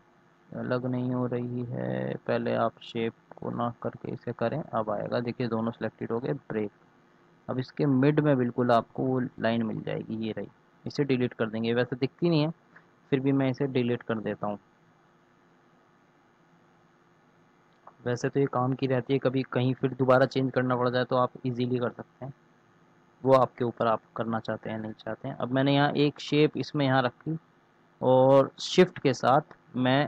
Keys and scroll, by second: 11.3 Delete.